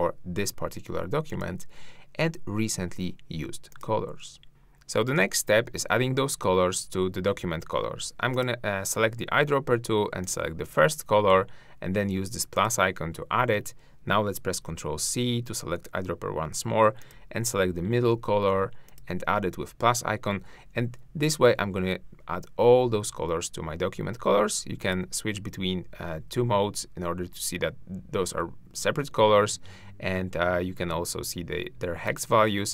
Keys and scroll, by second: 14.5 ctrl+c.